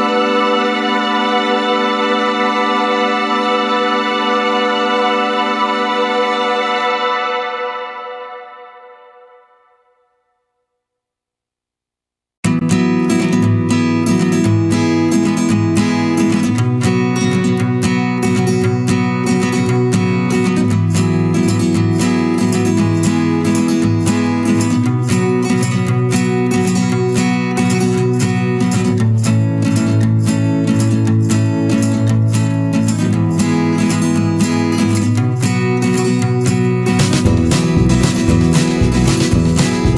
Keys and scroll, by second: 3.0 Return, 4.1 ctrl+space, 18.0 ctrl+-, 31.1 ctrl+-.